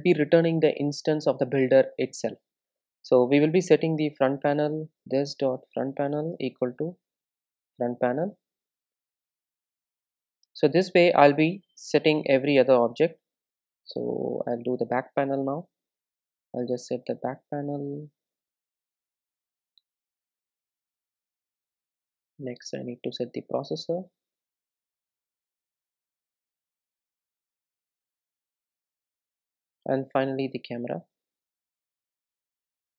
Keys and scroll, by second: 6.1 Return, 6.6 Return, 12.6 super+d, 18.0 super+v, 23.4 super+c, 25.2 super+v, 30.1 super+c, 32.3 super+v.